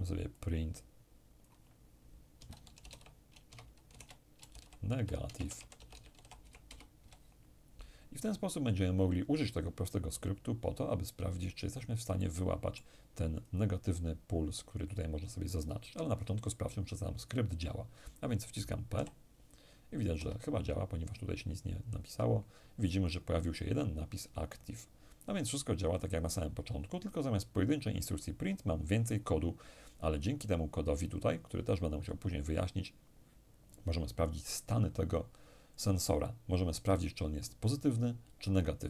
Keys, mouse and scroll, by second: 0.0-2.0 drag, 2.0-6.3 typing, 11.8-14.0 middle drag, 13.0 click, 18.6 p, 19.8 Escape, 20.8-21.7 scroll down 1, 21.7-22.4 scroll down 1, 22.4-22.8 scroll down 1.